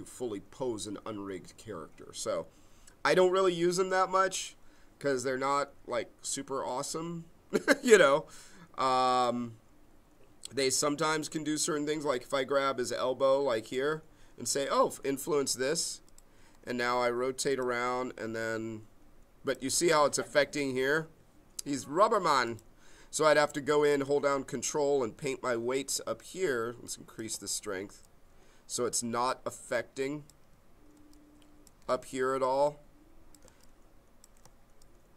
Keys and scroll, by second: 20.8 ctrl+z.